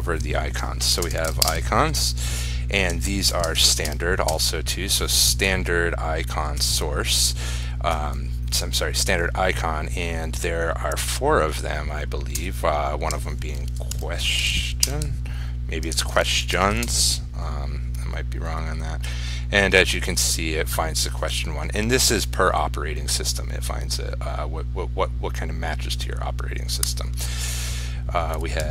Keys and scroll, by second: 1.7 ctrl+space, 16.1 ctrl+s, 16.8 ctrl+r.